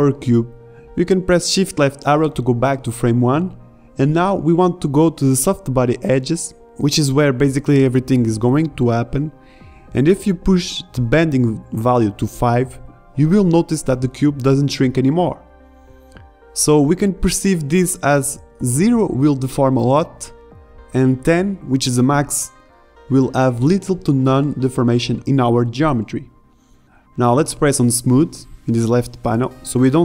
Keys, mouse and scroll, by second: 0.2 shift+Left, 12.6 alt+a, 17.5 alt+a.